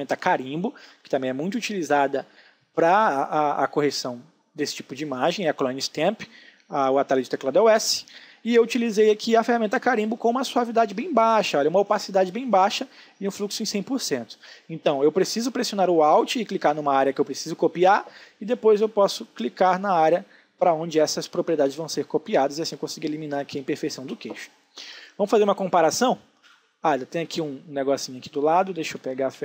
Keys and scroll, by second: 20.9 ctrl+alt+z, 23.2 space, 29.3 h.